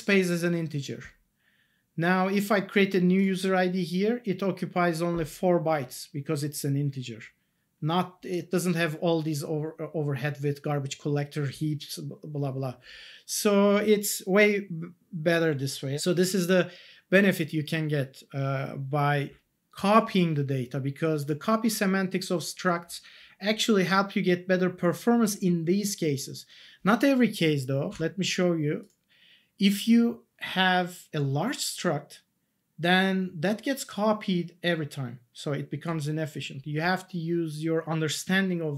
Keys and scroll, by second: 27.9 alt+Tab.